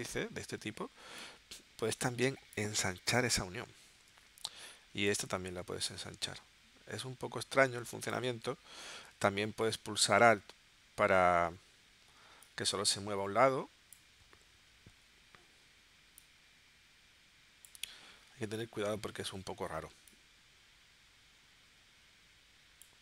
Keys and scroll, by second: 4.0 super+z, 8.9 super+z.